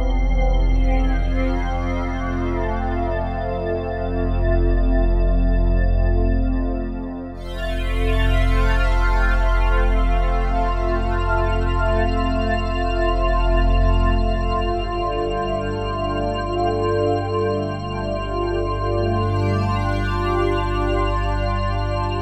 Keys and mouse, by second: 3.0-5.3 alt+drag, 6.1-11.2 drag, 12.6-14.5 drag, 16.7 ctrl+alt+click, 18.3 alt+click, 19.2 alt+drag, 20.2 alt+click, 20.9 ctrl+alt+click, 21.7 ctrl+alt+click.